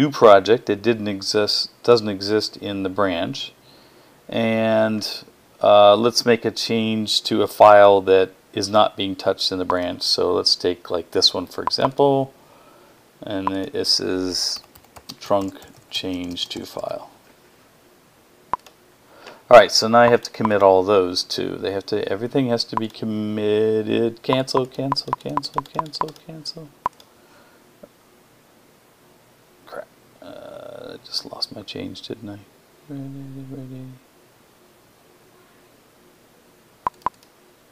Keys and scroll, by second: 13.9-17.3 typing.